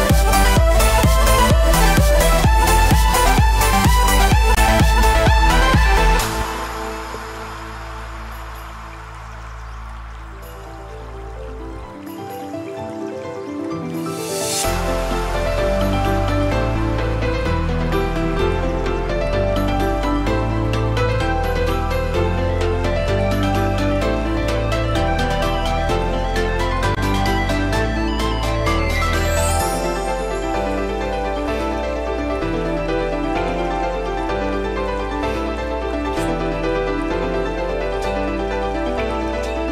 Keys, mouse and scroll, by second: 3.2 click, 7.1 alt+a, 7.5 Tab, 8.1 alt+a, 8.2-8.5 scroll down 4, 8.5 shift+middle click, 9.6 middle click, 10.0-10.9 shift+scroll up 4, 10.1 shift+middle click, 10.6 shift+middle click, 11.1 click, 11.7 Tab, 11.9 middle click, 12.5 shift+middle click, 13.7 l, 14.4 middle click, 15.4 scroll down 1, 15.6 shift+middle click, 15.9 middle click, 18.3 click, 23.2 click, 24.1 alt+a, 24.4 Tab, 24.8 middle click, 25.6 shift+middle click, 26.4 Tab, 26.6 middle click, 27.0 shift+middle click, 27.3-27.7 scroll up 3, 27.6 shift+middle click, 28.3 scroll down 1, 28.6 shift+middle click, 30.0 l, 31.5 scroll down 1, 31.7 middle click, 32.9 shift+middle click, 34.9 click.